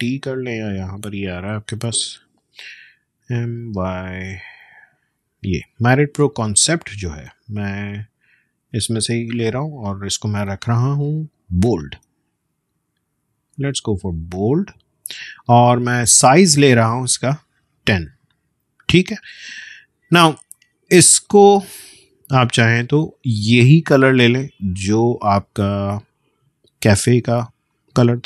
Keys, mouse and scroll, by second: 0.6 click, 3.2 m, 8.6-14.3 drag, 20.5 click, 21.3-22.3 alt+scroll up 1, 22.3-22.7 alt+scroll down 1, 23.6-27.7 drag.